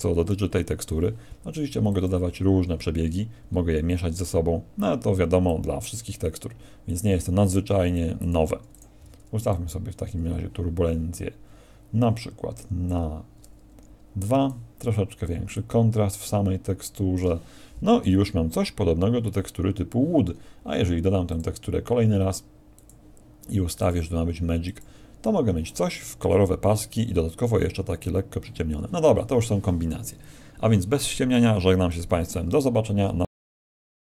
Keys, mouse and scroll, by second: 0.3 right click, 1.9 click, 3.5-3.8 scroll up 2, 5.4 click, 6.8 click, 7.6 click, 8.1 click, 8.7 click, 12.8 click, 15.5 click.